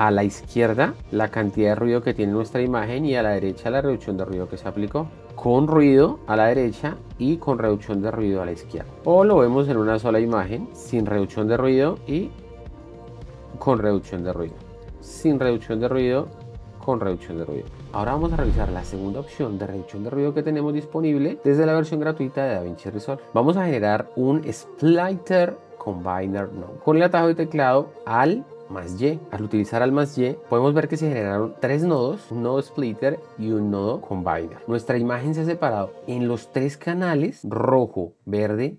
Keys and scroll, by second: 30.2 alt+y.